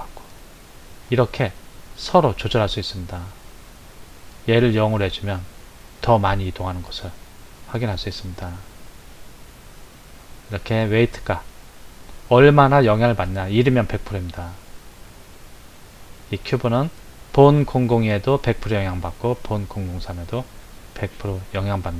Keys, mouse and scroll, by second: 0.7-3.9 drag.